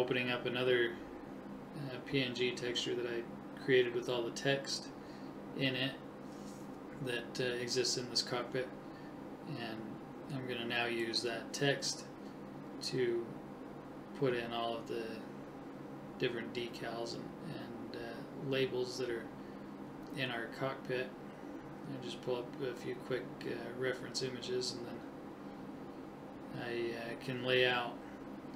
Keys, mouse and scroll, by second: 0.0 click, 1.4-4.5 drag, 6.9 click, 8.1 alt+h, 9.3-11.5 right drag, 11.2 shift+h, 11.9 KP_1, 12.6 right click, 16.0 n, 16.8 click, 23.0-25.5 drag.